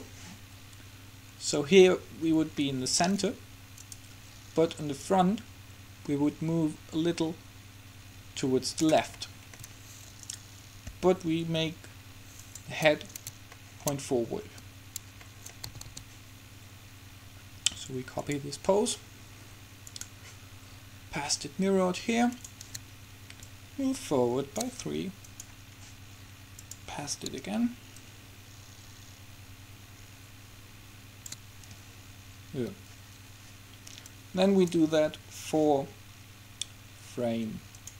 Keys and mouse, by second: 3.0-4.0 middle drag, 4.0-5.1 right drag, 5.1 middle click, 5.8-7.0 drag, 9.3-10.4 middle drag, 10.4-12.3 right drag, 11.0 r, 15.9 a, 16.0 a, 18.4-21.8 drag, 22.5-29.8 drag, 34.3-36.0 drag.